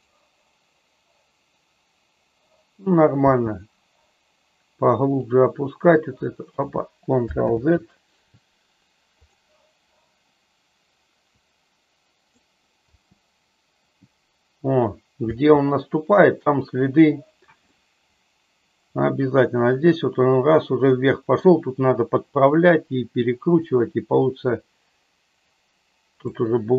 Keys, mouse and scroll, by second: 0.1 click, 3.4 space, 5.2-6.7 drag, 7.6 ctrl+z, 9.2 click, 11.4 click, 12.8 space, 15.5 space, 17.8-21.5 middle drag, 23.6-26.4 drag.